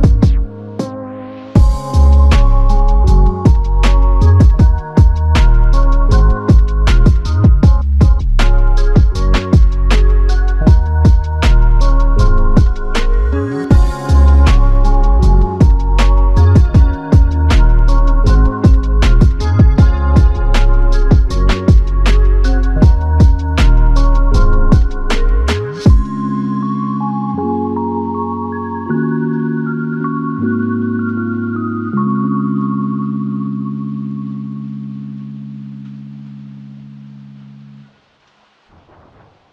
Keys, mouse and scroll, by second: 27.1 alt+click, 36.8 alt+click.